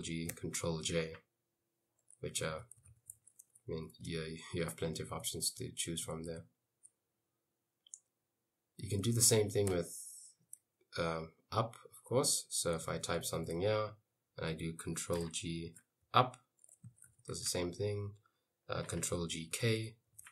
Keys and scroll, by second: 0.4 ctrl+j, 2.2-6.3 typing, 5.4 Escape, 8.7-10.8 typing, 12.6-14.0 typing, 15.3 ctrl+g, 16.1 Up, 16.6-17.9 typing, 19.1 ctrl+g, 19.6-20.3 typing.